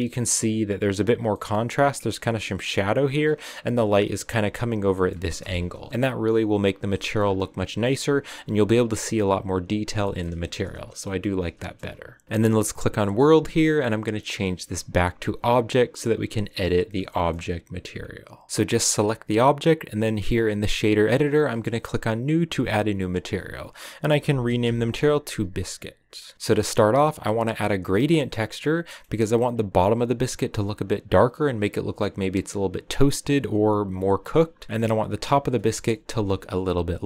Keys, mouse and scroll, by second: 1.2 scroll up 1, 1.2-2.3 middle drag, 2.3 scroll down 1, 2.5 middle click, 3.2-4.2 scroll down 4, 4.2-4.8 scroll down 1, 4.8 middle click, 5.5 KP_0, 5.9-7.2 shift+middle drag, 7.2-7.5 scroll up 3, 9.9 shift+middle click, 10.1 scroll down 2, 11.2-17.4 middle drag, 17.4-18.0 scroll down 2, 18.5-22.1 right drag, 22.1-26.3 drag, 26.3 a, 27.8 middle click, 28.4-28.8 scroll up 3, 28.8-36.1 middle drag, 36.1 KP_0.